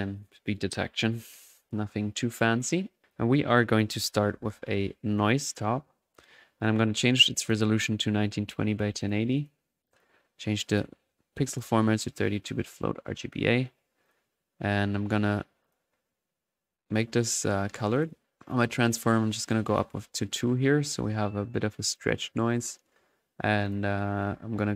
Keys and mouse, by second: 1.0-1.4 drag, 1.8 click, 3.0-4.0 drag, 4.0-4.9 typing, 5.1-6.3 drag, 5.8-6.6 middle drag, 6.6-7.7 drag, 9.0 click, 9.3 click, 10.7 click, 11.4-13.5 drag, 14.0-15.3 drag, 15.6 click, 16.6 click, 18.5-19.5 drag, 19.6 click, 20.3 middle click, 21.9 click.